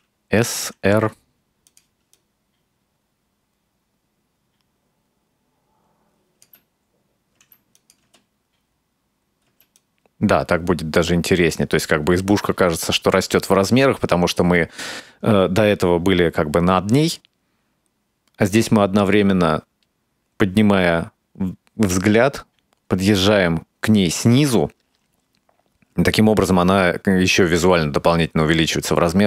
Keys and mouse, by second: 0.6 r, 2.2-6.6 drag, 6.5 space, 7.4 space, 7.8 click, 8.1 space, 9.5 space, 9.8-29.2 drag.